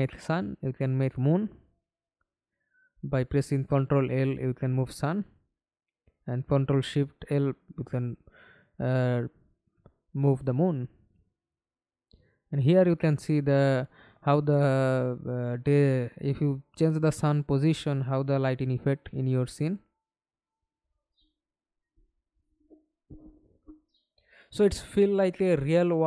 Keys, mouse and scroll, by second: 4.2-5.6 scroll down 16, 8.4-9.0 scroll down 7, 11.2 scroll up 1, 23.4-24.3 scroll down 8, 24.8-25.8 scroll down 5, 25.8-26.0 scroll down 1.